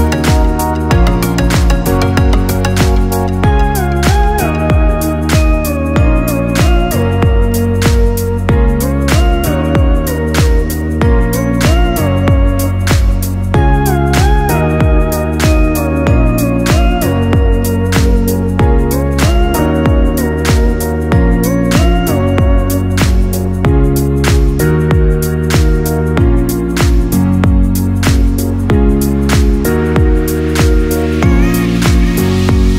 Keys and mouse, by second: 0.2 click, 1.1-3.2 ctrl+middle drag, 3.2 click, 5.0 f, 7.0 click, 7.7 click, 8.8 ctrl+KP_2, 9.1-9.5 ctrl+KP_2, 10.2-11.8 ctrl+middle drag, 11.8-12.1 ctrl+KP_6, 12.2 ctrl+KP_6, 12.4 ctrl+KP_6, 12.9-13.7 ctrl+KP_2, 14.4-15.9 ctrl+middle drag, 15.9 ctrl+KP_6, 16.1-16.5 ctrl+KP_6, 18.4 click, 20.5 g, 23.6 shift+click, 25.2 f, 26.7 shift+click, 27.7 shift+click, 28.9 f, 30.5-32.7 ctrl+middle drag.